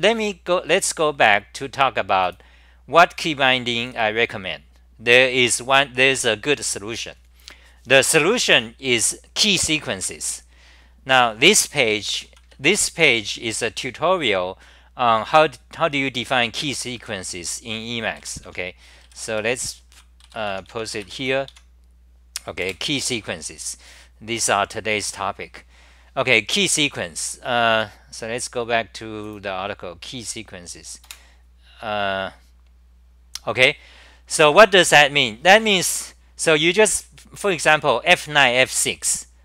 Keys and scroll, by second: 17.0 d, 18.2 k, 18.4 o, 19.7-21.2 typing, 21.5 Home, 22.6 super+r.